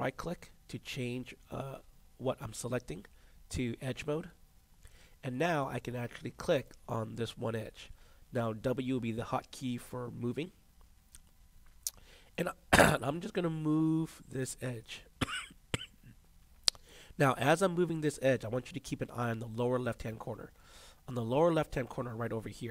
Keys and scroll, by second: 10.3 w.